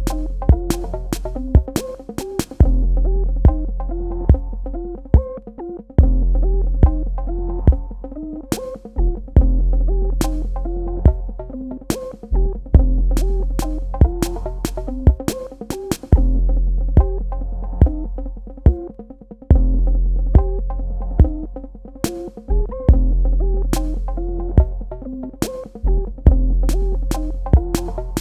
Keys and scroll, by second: 3.4 KP_1, 3.6 KP_0, 7.2 space, 16.1 space, 20.9-22.2 typing, 25.1 v, 26.0 Escape, 26.7 space, 28.1 space.